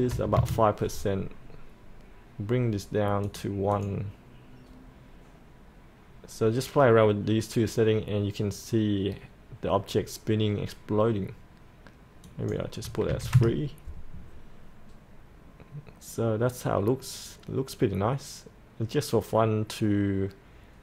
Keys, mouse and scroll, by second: 0.1 KP_5, 3.3 click, 13.1 KP_3.